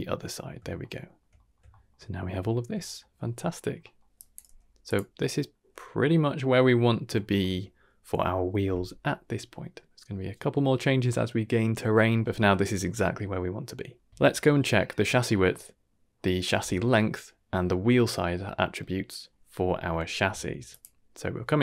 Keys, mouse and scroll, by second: 0.3 middle drag, 0.8-1.1 shift+middle drag, 1.3 middle drag, 1.7 shift+middle drag, 2.0 scroll up 2, 2.4-3.5 shift+middle drag, 3.5-3.9 scroll down 3, 3.8 middle click, 4.1 drag, 4.4 g, 5.8-6.4 scroll down 3, 6.1 middle click, 7.1 shift+middle drag, 13.5-14.1 middle drag, 14.1 ctrl+s, 14.1 click, 14.4 scroll down 2, 14.6 middle drag, 15.1 shift+middle drag, 15.5-16.5 middle drag, 17.5-18.8 middle drag, 19.5 middle click, 20.0 shift+middle drag, 20.7 click.